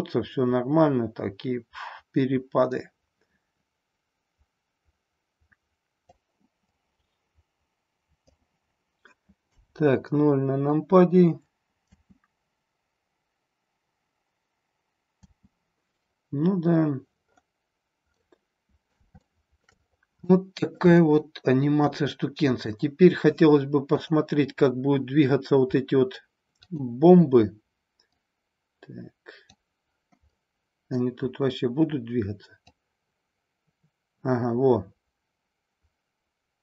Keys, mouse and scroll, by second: 6.6-8.3 drag, 9.4 KP_0, 11.8 space, 15.1 space, 18.2-18.9 middle drag, 19.2-19.8 shift+middle drag, 20.3 middle click, 21.0-21.9 shift+middle drag, 22.2 middle click, 26.7 click, 28.1-29.5 drag, 30.3-31.0 middle drag, 32.6-36.6 drag.